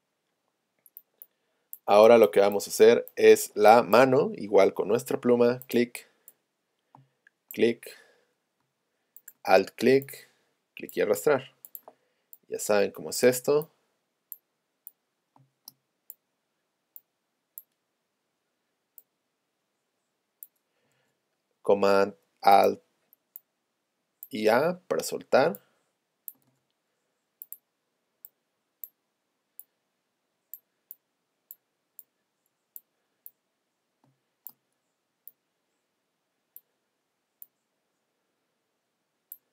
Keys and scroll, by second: 4.7 p, 6.9 space, 15.4 space, 34.1 space.